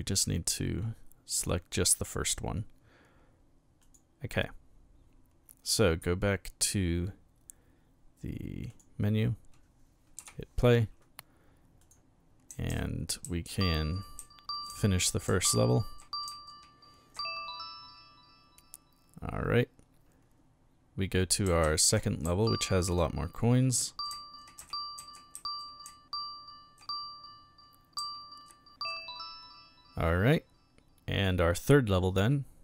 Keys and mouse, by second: 1.3 click, 3.8 click, 8.7 click, 10.2 p, 11.8 click, 12.2-16.6 typing, 21.2-22.3 typing, 23.5-26.3 typing, 28.0 s.